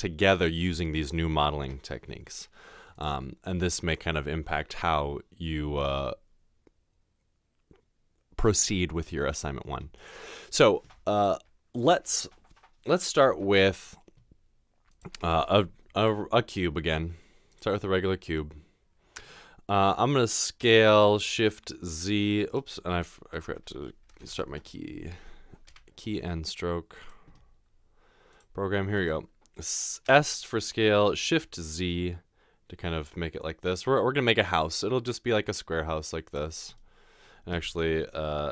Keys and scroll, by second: 30.1 typing, 31.3 typing.